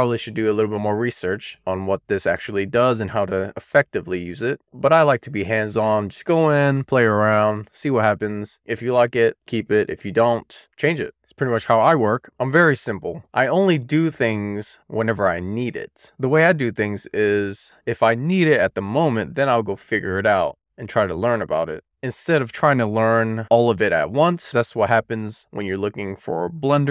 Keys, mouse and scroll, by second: 1.5-15.7 drag, 20.1 Tab, 21.9-22.9 shift+scroll down 3, 23.2 shift+middle click, 24.9-26.9 middle drag.